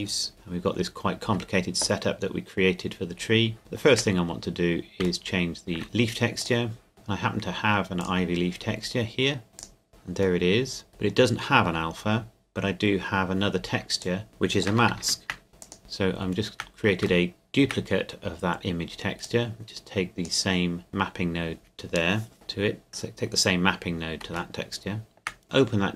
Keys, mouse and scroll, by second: 0.2 scroll down 1, 0.3 shift+middle click, 2.9-3.6 scroll up 1, 3.6 shift+middle click, 4.4 scroll up 1, 5.2 shift+middle click, 5.8-6.4 scroll up 1, 6.4 click, 9.6 click, 9.9-10.4 scroll up 1, 10.4 middle click, 10.9-12.9 scroll down 1, 14.0 click, 14.3 shift+middle click, 15.0 shift+d, 15.6 click, 15.8 shift+middle click, 16.3 shift+scroll down 1, 17.3 shift+middle click, 17.8 scroll down 1, 19.2 click, 24.3 click, 24.5 shift+middle click, 25.4 click.